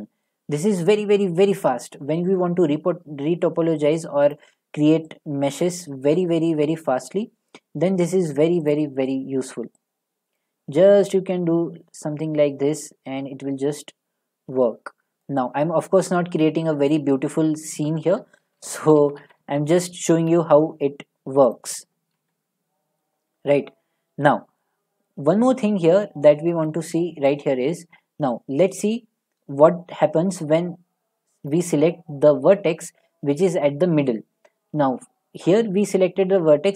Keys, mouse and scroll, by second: 0.8 click, 2.7 scroll, 4.3 click, 5.7 click, 6.2 r, 8.3 click, 9.4 click, 10.4 click, 12.6 click, 13.3 click, 15.2-16.3 drag, 16.4 scroll, 17.8 middle click, 18.4 ctrl+z, 18.6 ctrl+z, 18.8 ctrl+z, 19.0 ctrl+z, 19.6 ctrl+z, 20.1 z, 21.5 click, 22.2 ctrl+z, 23.4 middle click, 23.6 middle click, 23.7-24.2 scroll, 24.7 shift+middle click, 26.0 middle click, 26.7 shift+middle click, 31.5 click.